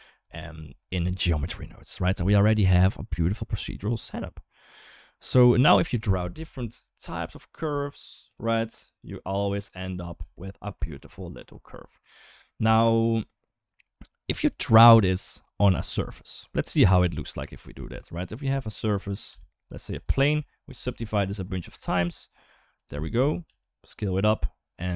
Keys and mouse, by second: 5.1 middle click, 6.2 KP_7, 6.5 Tab, 7.1 shift+middle click, 7.7 click, 9.0 click, 10.0 Tab, 10.1-10.5 middle drag, 11.3-11.8 middle drag, 12.1 shift+middle drag, 12.8 middle drag, 16.9 shift+middle drag, 18.7 shift+a, 19.1 g, 20.1 Tab, 20.6 ctrl+r, 21.9 ctrl+r, 23.0 Tab, 23.3 s.